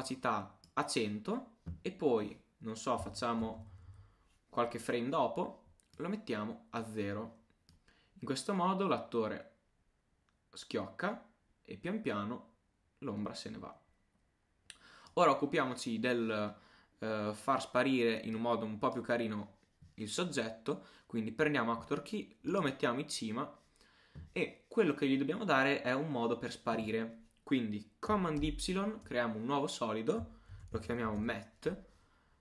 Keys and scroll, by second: 3.1 shift+Page_Down, 3.6 shift+Page_Up, 28.4 super+y, 30.3-31.3 typing.